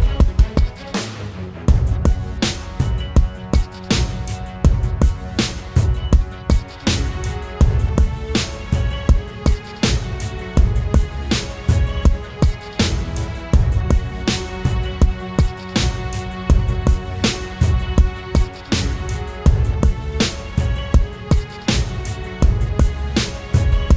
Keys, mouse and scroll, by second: 0.6 typing, 1.7 double click, 5.8 right click, 7.9-9.2 typing, 12.7 double click, 19.1 alt+click.